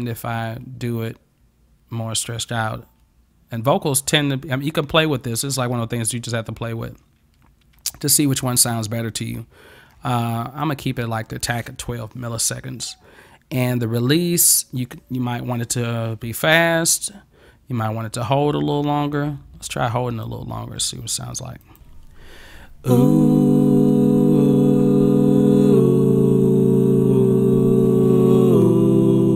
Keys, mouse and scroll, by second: 1.1-10.6 drag, 14.2-20.3 drag, 21.7 click.